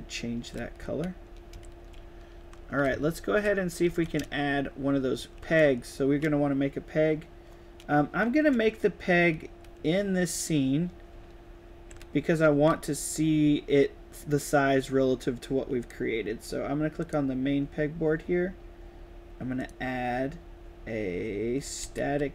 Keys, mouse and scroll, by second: 0.4 shift+a, 0.7 shift+s, 1.8-4.9 typing, 5.2 right click, 8.4-9.9 right drag, 8.5 a, 11.0 s, 11.8-12.9 drag, 12.0 d, 12.4 w, 15.7 drag, 16.9 click, 19.5 click, 21.7 s.